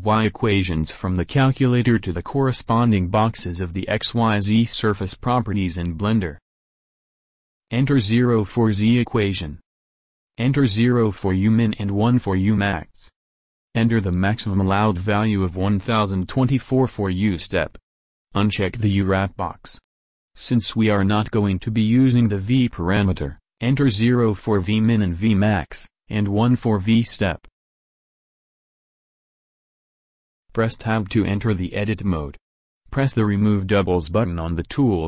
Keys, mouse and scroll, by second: 0.8 click, 4.9-9.1 drag, 13.0-14.5 drag, 14.7-16.6 drag, 17.7 click, 18.8-20.9 drag, 29.1-30.9 middle drag, 30.9 Tab.